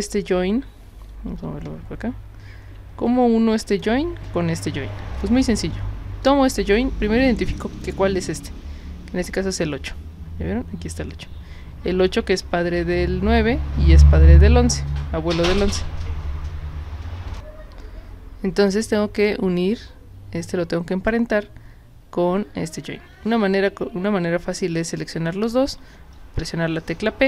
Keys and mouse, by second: 3.7 click, 5.2 click, 6.2 click, 7.2 drag, 7.7 click, 9.5 click, 17.3 click, 18.6 click, 19.1 click, 24.9 shift+click, 26.4 p.